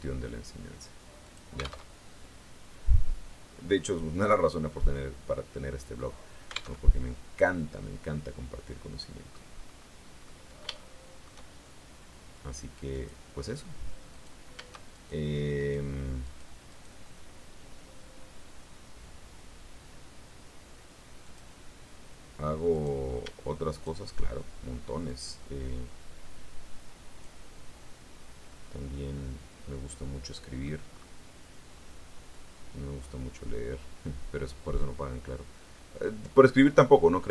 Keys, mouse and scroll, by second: 1.1 click, 1.7 alt+Tab, 6.6 alt+Tab, 7.7-9.4 middle drag, 9.8 scroll up 2, 10.1-11.3 middle drag, 12.8 click, 14.0 right click, 14.8 shift+right click, 15.4 right click, 16.1 right click, 16.6 right click, 16.9-21.1 middle drag, 21.1 click, 22.6 right click, 23.6 shift+right click, 24.9-27.3 drag, 28.4-30.7 middle drag, 30.7 scroll up 1, 32.2-36.9 drag, 36.9 middle click.